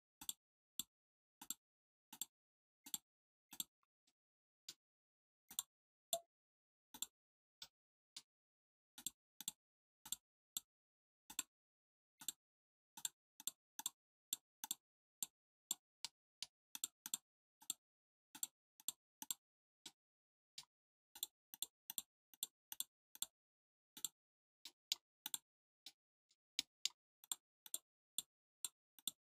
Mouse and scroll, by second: 0.1 click, 0.6 click, 1.3 click, 2.0 click, 2.8 click, 3.4 click, 4.0-4.6 middle drag, 4.9-5.4 scroll up 2, 5.4 click, 5.9 click, 6.8 click, 7.5 middle click, 8.5 scroll up 1, 8.9 click, 9.3 click, 9.9 click, 10.4 click, 11.2 click, 12.1 click, 12.9 click, 13.3 click, 13.7 click, 14.1 click, 14.5 click, 15.0 click, 15.5 click, 15.9 middle click, 16.6 click, 16.9 click, 17.5 click, 18.2 click, 18.7 click, 19.1 click, 19.7 middle click, 21.0 click, 21.4 click, 21.8 click, 22.2 click, 22.6 click, 23.0 click, 23.9 click, 24.5 middle click, 25.1 click, 25.8 middle click, 26.5 middle click, 27.1 click, 27.6 click, 28.0 click, 28.5 click, 28.9 click.